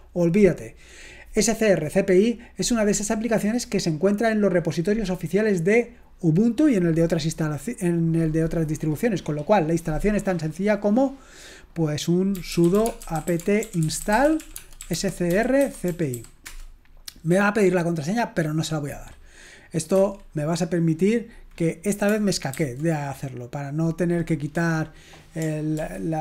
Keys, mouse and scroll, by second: 12.1-17.2 typing, 20.0 Escape, 22.7 ctrl+c, 25.8 ctrl+l.